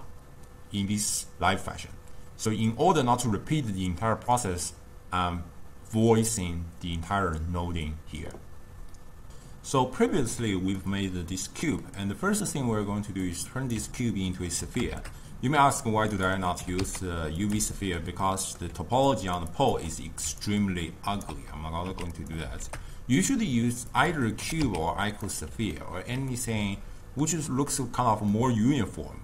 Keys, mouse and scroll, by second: 10.9-13.4 middle drag, 13.4 click, 14.1-15.0 ctrl+middle drag, 15.0 shift+a, 16.6 g, 17.8-18.9 shift+middle drag, 18.9-20.4 typing, 19.1 click, 19.6 click, 20.5 right click, 21.4 d, 21.9 x, 22.7 shift+a, 24.5 g, 25.8-29.2 ctrl+middle drag.